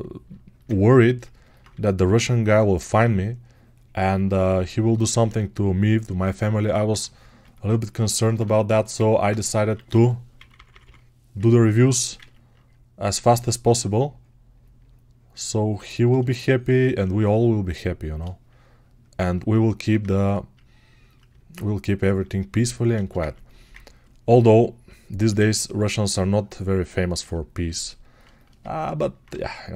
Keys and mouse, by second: 4.7-16.6 alt+right drag, 22.8-29.1 ctrl+alt+shift+right drag.